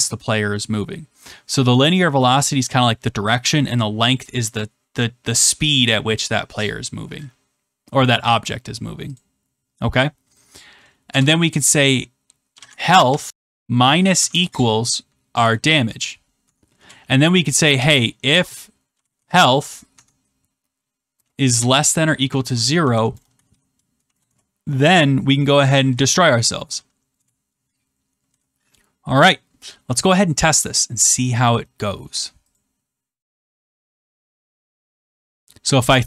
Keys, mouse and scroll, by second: 7.7 middle click, 8.8 middle click, 9.1 click, 11.0 Return, 12.2-16.3 typing, 16.4 Tab, 16.7 Return, 17.4-19.6 typing, 19.9 Tab, 21.2-23.9 typing, 24.2 Return, 25.4-26.3 typing, 27.1 Return, 32.5 click.